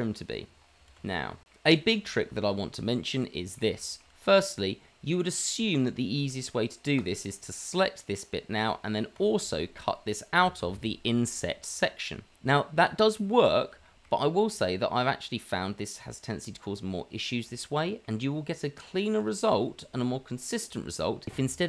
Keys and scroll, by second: 0.5 g, 0.5 shift+z.